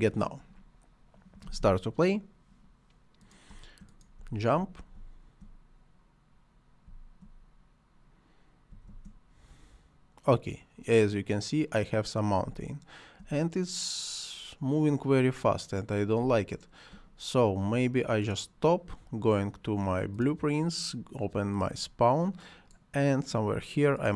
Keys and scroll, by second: 3.5 space, 6.8 space, 8.7 space, 12.4 space, 16.2 space.